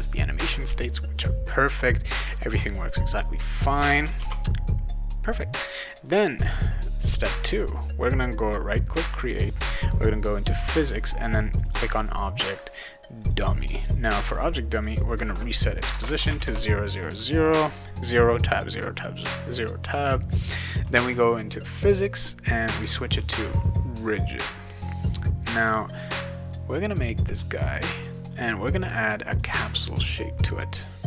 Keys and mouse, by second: 4.2 ctrl+s, 5.6 click, 6.0-6.6 right drag, 11.6 click, 13.2 click, 14.7 click, 14.9 click, 16.0 Tab, 16.3 Tab, 20.7 click, 21.8 click, 23.0 click, 28.3 click, 29.3 click.